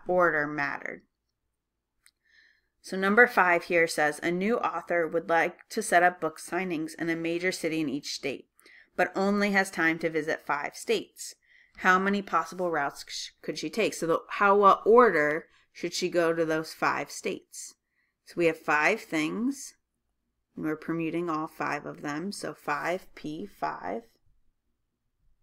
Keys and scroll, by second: 12.9-13.7 typing.